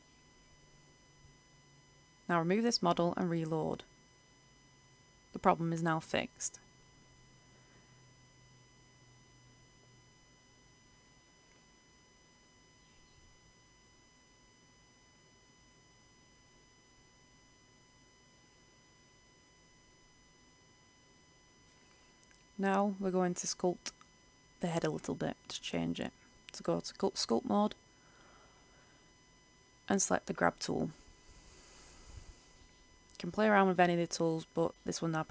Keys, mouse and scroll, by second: 2.5 click, 2.8-10.9 drag, 10.9 Return, 11.5 click, 16.8 click, 19.4-20.2 scroll up 1, 20.2 right click, 25.7-35.3 drag.